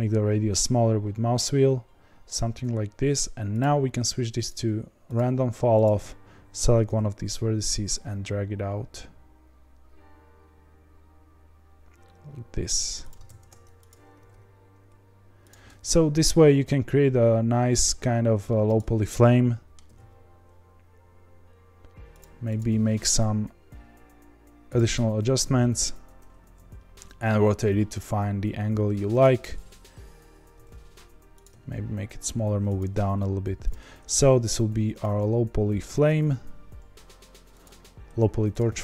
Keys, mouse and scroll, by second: 5.0 click, 6.9 g, 13.2 ctrl+z, 13.9 click, 14.2 g, 15.6-18.7 middle drag, 18.7 click, 19.0 middle click, 19.9 g, 22.6 click, 22.8 g, 25.9 Tab, 26.4 r, 30.6 g, 31.5 s, 33.0 g, 33.9-34.2 scroll down 3, 34.5 s, 35.1 g, 38.5 click.